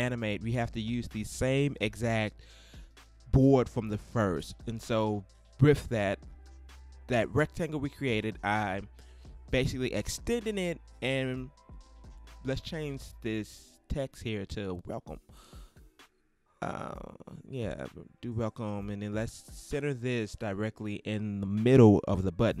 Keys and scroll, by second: 14.1-18.2 typing.